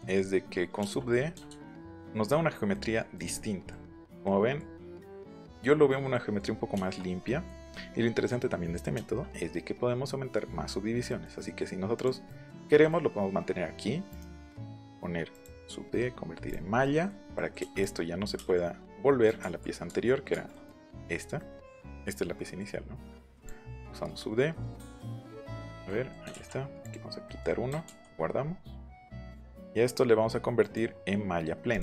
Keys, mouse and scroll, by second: 0.7 middle click, 1.9 middle click, 4.2 middle click, 5.0 middle click, 6.0 middle click, 6.6 shift+middle click, 7.2 middle click, 8.9 shift+middle click, 11.0-11.7 scroll up 1, 11.9 click, 12.2-13.3 scroll up 1, 14.0 right click, 15.3-16.8 right drag, 17.3 scroll up 2, 17.5 scroll down 2, 17.7-18.7 drag, 19.3 ctrl+z, 19.8 ctrl+z, 20.3 ctrl+z, 20.3-20.6 ctrl+scroll up 5, 21.3-21.9 scroll up 2, 22.4 scroll up 2, 23.3 click, 24.1 scroll up 1, 24.9 right click, 25.3 click, 25.8 ctrl+scroll up 1, 26.3 ctrl+b, 26.8 middle click, 27.2 middle click, 28.7 middle click, 29.0 shift+middle click, 29.5 right click, 31.7 click.